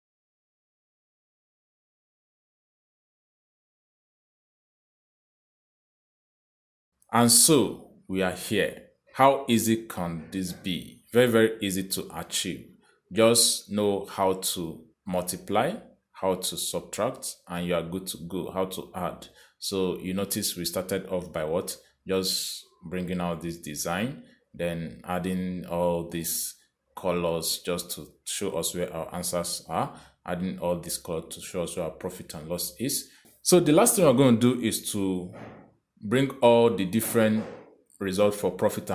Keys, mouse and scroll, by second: 0.0-5.9 typing, 0.1 click, 0.6 Return, 0.7 click, 1.1 click, 1.4 click, 1.6 Return, 1.7 click, 2.0 click, 2.5 click, 2.8 click, 3.0 click, 3.2 Return, 3.3 click, 3.5 click, 3.8 click, 4.2 click, 4.8 click, 5.0 click, 5.3 click, 5.5 click, 6.1 click, 18.8 click, 19.6 click, 21.1 click, 22.9 click, 24.4 click, 26.2 click, 28.3 click, 29.4 click, 30.4 click, 31.8 click, 36.6 click.